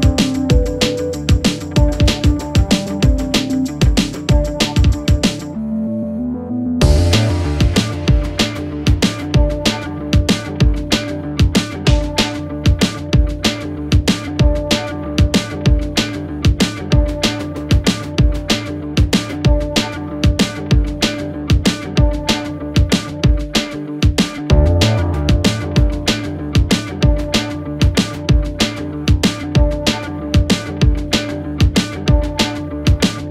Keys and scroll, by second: 0.3-1.4 typing, 6.3 Delete, 29.9 Escape.